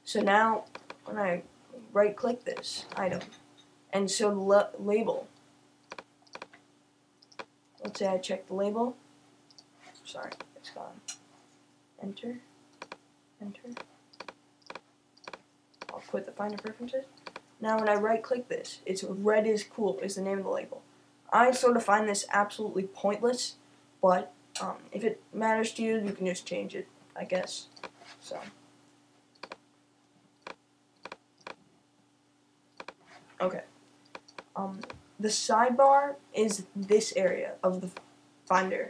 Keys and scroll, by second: 0.1 typing.